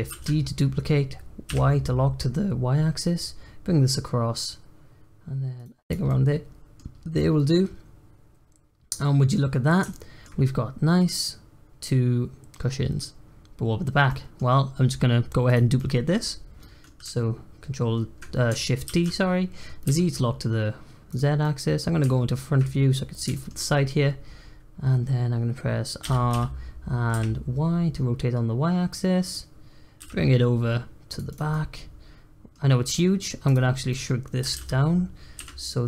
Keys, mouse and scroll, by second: 0.1 shift+d, 5.8 drag, 6.0-6.9 middle drag, 6.9 scroll down 1, 7.1-9.4 middle drag, 9.4-9.9 scroll up 1, 9.9-13.2 shift+middle drag, 13.2-14.0 scroll up 1, 14.0-15.4 middle drag, 15.4 click, 15.7-18.8 middle drag, 18.8 shift+d, 21.4 middle click, 23.3 shift+middle click, 23.6-24.0 scroll up 1, 24.0 scroll down 2, 24.2-25.0 scroll up 3, 25.0-26.0 scroll down 1, 26.0 r, 30.0 g, 31.3 click, 31.5-32.6 middle drag, 32.6 scroll down 3, 32.9-33.2 middle drag, 33.2 scroll up 1, 33.4 click, 33.9-34.4 middle drag, 34.4 s.